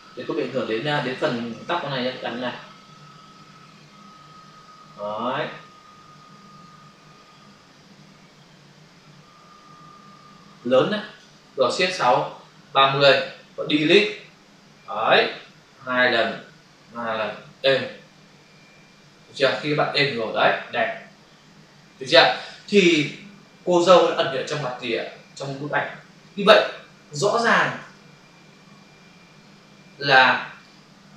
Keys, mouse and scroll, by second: 1.6 ctrl+d, 2.2 click, 12.0 shift+F6, 12.8 Return, 19.1 ctrl+d, 24.7 v, 27.8 ctrl+s, 30.6 click.